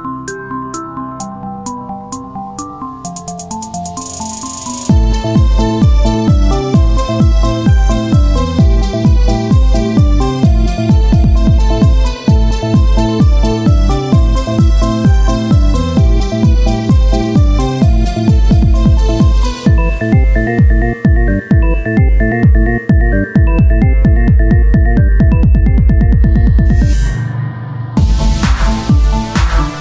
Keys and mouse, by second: 2.3 e, 5.5 z, 6.3 Tab, 12.7 KP_1, 13.1 z, 14.5 Tab, 15.8 e, 17.9-22.0 drag, 20.1 z, 22.0 KP_1, 22.6 z, 24.4 e, 27.3 r, 28.1 e.